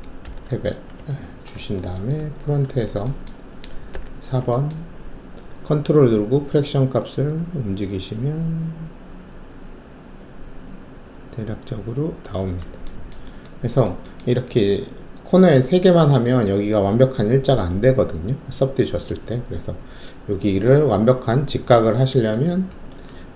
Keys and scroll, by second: 0.2 shift+b, 2.1 alt+shift+3, 4.5 alt+4.